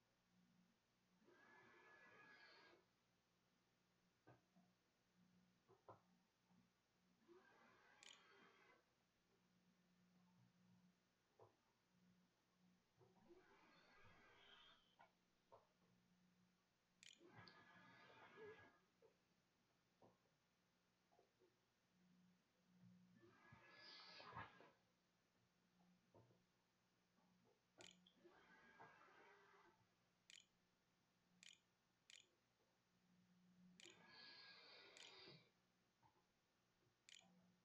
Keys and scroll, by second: 2.5 q, 2.6 Tab, 6.2-9.4 typing, 16.3 space, 16.5 Up, 16.8 Return, 23.9-24.7 typing, 26.5-27.7 typing, 29.0-37.6 typing.